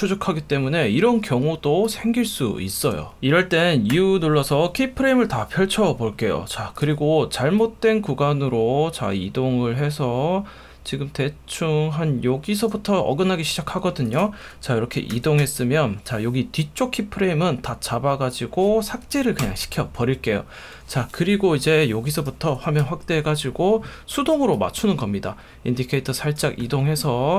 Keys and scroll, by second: 3.9 u, 15.1 =, 19.4 BackSpace, 22.8 super+=.